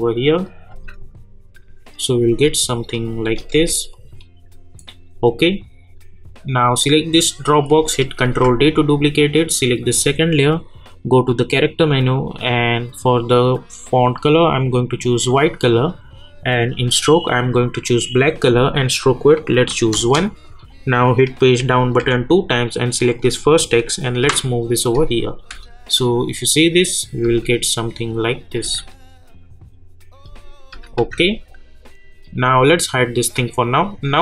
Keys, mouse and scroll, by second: 0.7 space, 2.9 click, 3.2 space, 3.9 click, 4.4 scroll up 1, 5.5 click, 8.2 ctrl+d, 9.6 click, 15.4 click, 19.9 Return, 20.4 click, 21.6 Page_Down, 23.0 click, 24.2 [, 25.3 click, 25.5 space, 28.3 click, 28.6 space, 31.3 click.